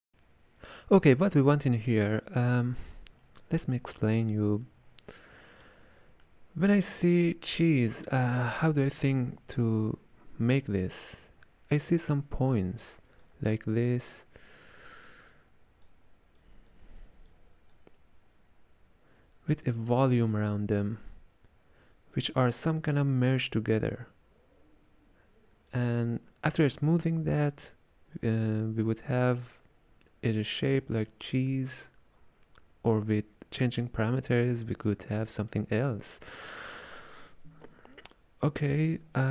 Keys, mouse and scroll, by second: 0.0 n, 3.8-6.3 drag, 6.3-11.2 shift+middle drag, 12.6-22.7 drag.